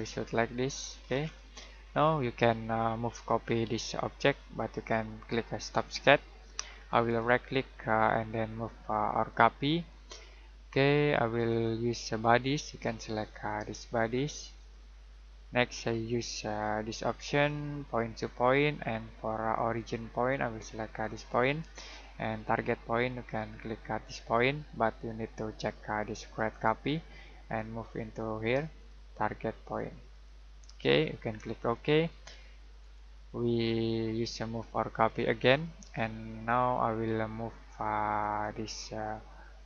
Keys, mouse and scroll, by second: 0.1 middle click, 1.0 scroll down 1, 1.2-3.0 scroll up 1, 3.0-5.5 scroll down 1, 7.0 right click, 9.1 click, 19.5 click, 32.8 right click, 38.2 click.